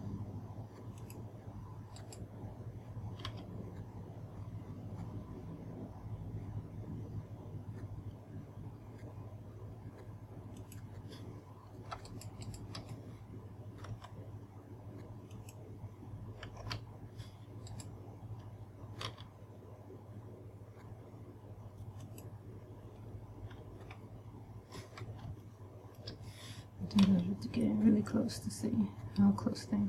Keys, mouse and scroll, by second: 1.6 click, 2.6 right click, 3.7 g, 11.3 click, 12.6 shift+right click, 13.0 shift+right click, 14.5 s, 16.0 click, 17.2 a, 18.2 right click, 19.6 g, 22.6 click, 23.6-24.4 scroll up 2, 24.6 scroll up 1, 25.9 shift+middle click, 27.6 g.